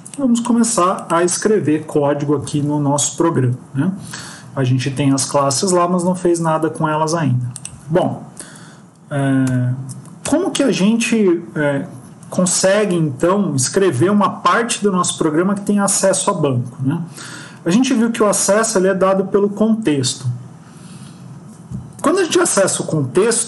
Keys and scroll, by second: 9.4 shift+Home, 10.2 BackSpace.